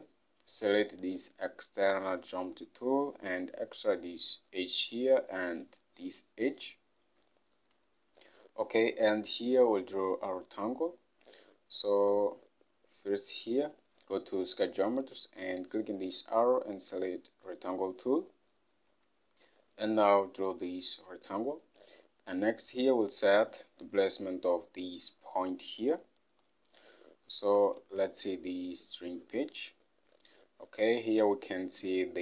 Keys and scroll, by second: 27.9 ctrl+Tab.